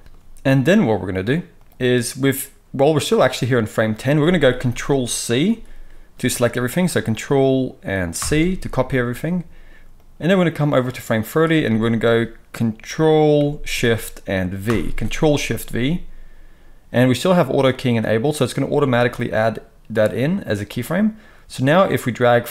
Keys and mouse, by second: 8.2 ctrl+c, 14.7 ctrl+shift+v.